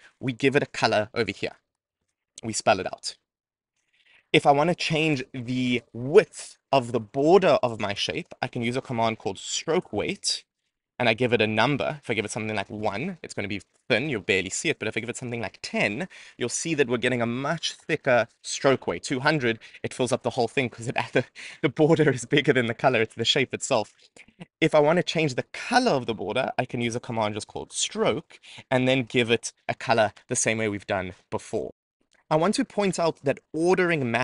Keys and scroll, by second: 4.4 Return, 24.3 Return.